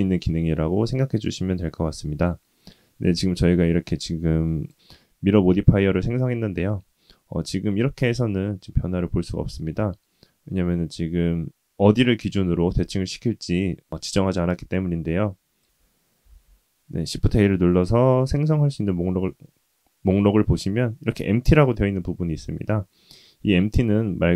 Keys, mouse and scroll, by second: 3.8-4.7 drag, 15.6 click, 15.6 ctrl+z, 15.6 shift+a, 16.2 shift+a.